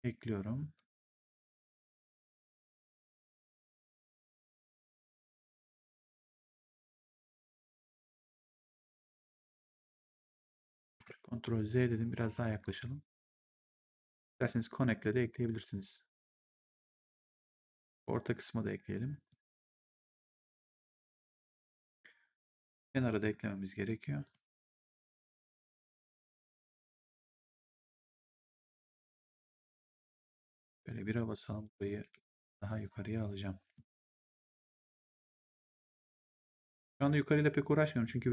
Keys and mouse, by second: 1.5 ctrl+click, 4.1 ctrl+click, 5.7 ctrl+click, 8.5 ctrl+click, 10.8 ctrl+z, 13.6 ctrl+click, 14.9 ctrl+click, 19.2 ctrl+click, 20.4 ctrl+click, 21.1 3, 22.7 1, 24.1 ctrl+click, 25.5 ctrl+click, 26.2 3, 27.5 w, 27.9 right click, 29.1 click, 30.2 1, 30.5 right click, 30.9 click, 31.9 w, 32.5 click, 35.1 click.